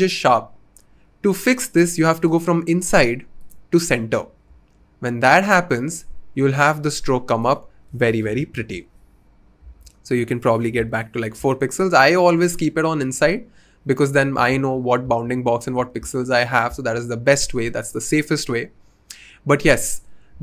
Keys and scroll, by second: 7.9-8.7 typing, 10.7 typing.